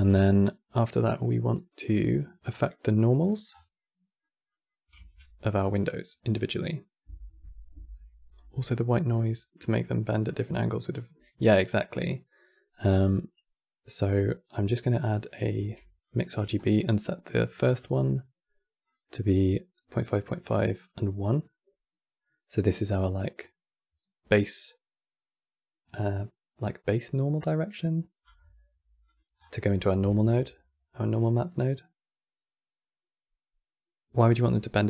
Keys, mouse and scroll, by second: 3.2 scroll down 6, 3.5-4.7 middle drag, 4.7 shift+a, 15.3 q, 16.3-17.1 scroll up 16, 16.5 middle drag, 17.4 click, 27.9 right click, 28.7 click, 29.1 scroll down 6, 29.4-29.8 middle drag, 29.8 shift+a.